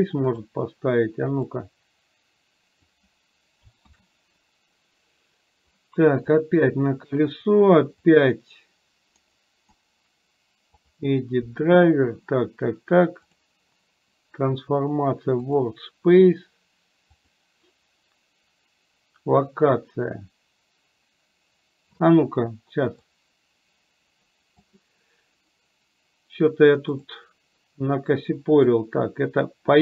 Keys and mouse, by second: 1.5-3.1 drag, 4.1 ctrl+z, 6.2 click, 8.2 click, 23.4-24.6 drag, 29.0-29.8 drag.